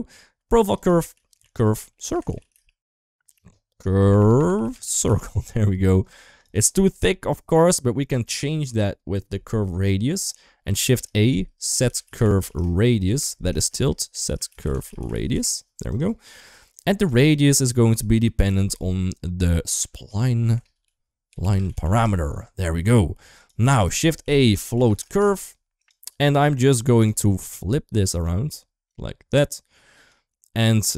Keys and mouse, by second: 0.4-6.3 drag, 2.0 BackSpace, 3.9 BackSpace, 10.6 shift+a, 13.5 shift+a, 16.7 click, 17.8-23.2 drag, 21.6 a, 23.5 shift+a, 26.3 click, 28.2 click, 29.5 click.